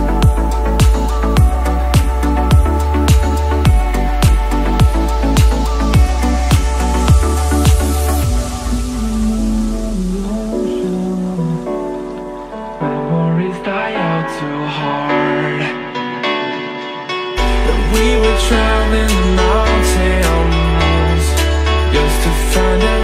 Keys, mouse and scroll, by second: 3.2 click, 3.6 e, 9.1 click, 10.0-17.4 drag, 17.5-23.0 middle drag.